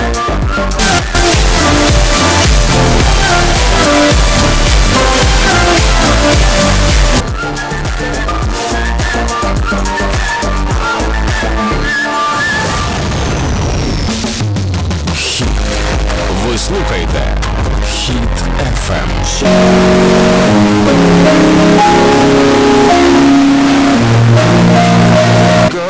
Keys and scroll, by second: 7.2 Page_Down, 25.6 Page_Down.